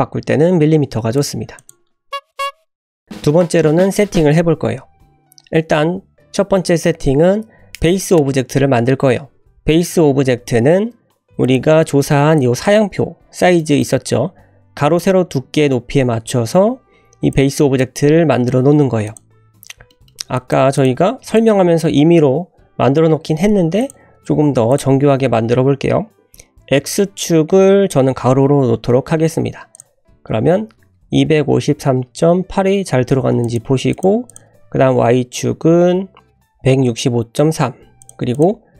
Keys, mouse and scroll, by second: 1.1 click, 1.5 click, 11.4 click, 12.4 click, 13.1 scroll up 2, 13.6 shift+middle click, 16.6-17.0 scroll down 1, 17.3-17.9 drag, 19.1 click, 19.9 shift+middle click, 20.3 click, 20.8 click, 20.8 typing, 21.3 click, 23.8 click, 24.7 click, 29.7-34.0 drag, 34.3-38.1 drag, 38.3 click.